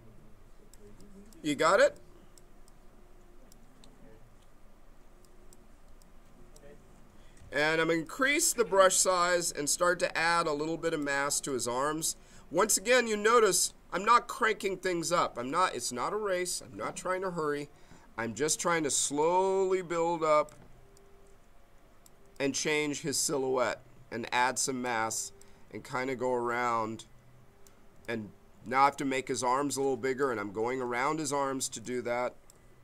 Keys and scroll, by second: 7.6 b, 19.0 m, 31.7 b.